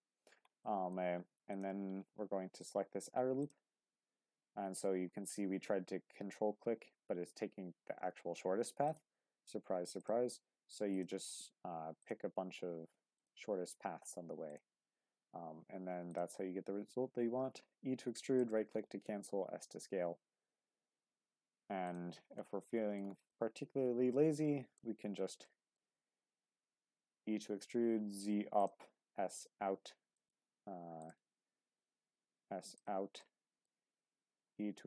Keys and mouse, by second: 0.7 middle click, 1.5 click, 3.4 ctrl+click, 12.0-13.2 ctrl+drag, 16.7 e, 19.0 s, 21.8 click, 22.4 middle click, 23.3-24.4 middle drag, 24.8 middle click, 25.5 middle click, 27.1 e, 27.6 z, 28.6 click, 28.9 s, 30.2 click, 31.6 s, 32.7 click, 33.2 middle click, 34.3 e, 34.6 z.